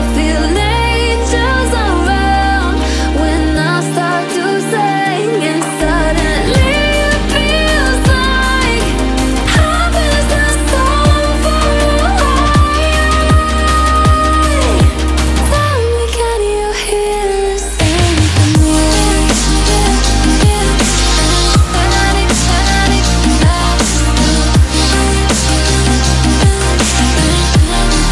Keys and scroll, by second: 8.1 ctrl+a.